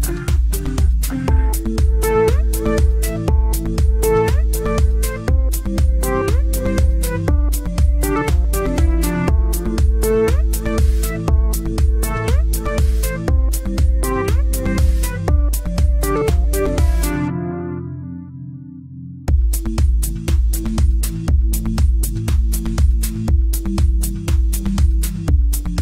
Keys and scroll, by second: 23.2 c.